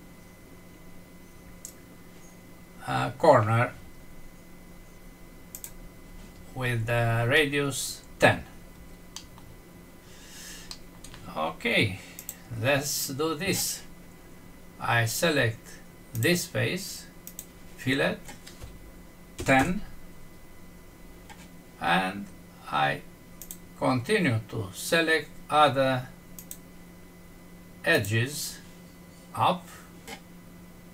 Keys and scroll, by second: 9.1 F6, 10.7 Home.